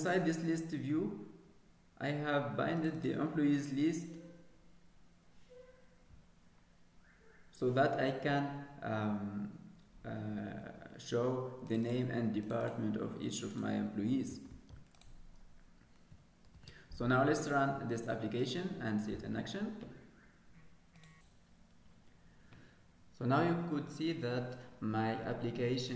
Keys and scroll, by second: 14.7 ctrl+s, 17.0 ctrl+s, 20.0 F5.